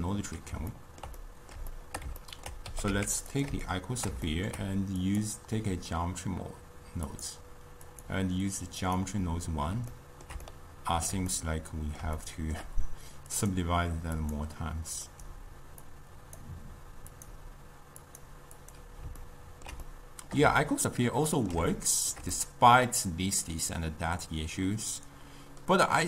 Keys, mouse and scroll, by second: 0.8-2.8 ctrl+middle drag, 2.8 g, 3.8-5.1 shift+middle drag, 5.1-10.0 drag, 10.0-13.4 ctrl+middle drag, 13.4-16.4 drag, 17.2-19.3 drag, 19.3-26.0 ctrl+middle drag.